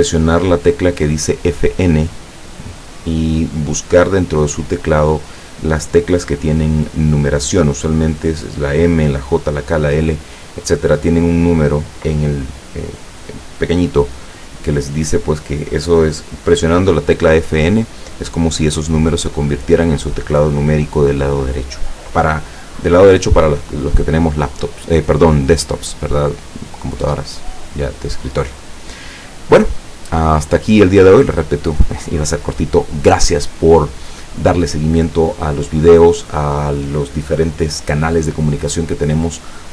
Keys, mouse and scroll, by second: 28.2-30.3 middle drag, 30.5-31.3 middle drag.